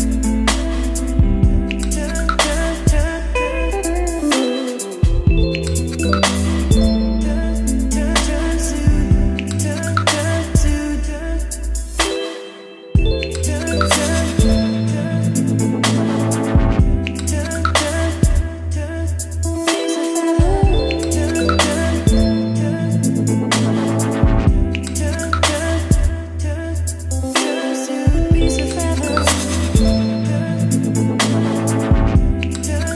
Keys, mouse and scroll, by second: 28.3-32.9 drag.